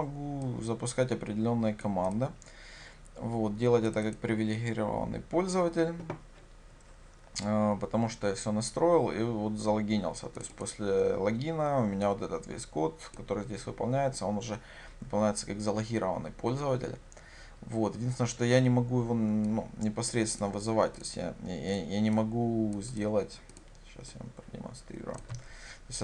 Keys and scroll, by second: 25.3 ctrl+c.